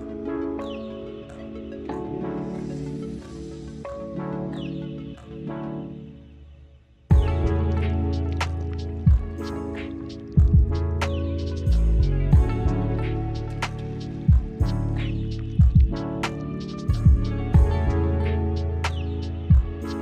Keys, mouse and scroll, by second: 0.0 scroll down 1, 0.1-0.6 middle drag, 0.6 drag, 1.0 click, 1.8 shift+d, 2.1 click, 2.5 middle drag, 2.6-3.0 scroll up 12, 3.0 middle click, 3.7 click, 4.2 middle drag, 4.4 `, 4.8 r, 5.8 click, 6.4 s, 7.0 click, 8.5 click, 9.1-9.9 middle drag, 10.0 click, 10.3-11.0 middle drag, 11.0 click, 11.6 click, 11.8 click, 14.6 click, 16.0 scroll up 1, 17.6 click, 17.8 middle click, 17.9-18.4 scroll down 11, 18.2 middle click, 18.5 click.